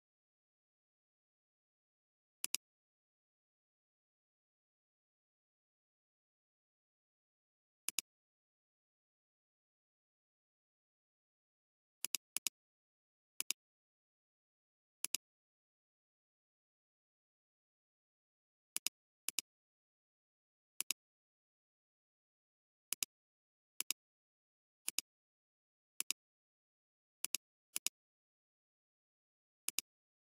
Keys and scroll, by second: 12.4 alt+space, 13.3 space, 13.8 space, 19.4 space, 21.5 alt+space, 27.2 alt+space.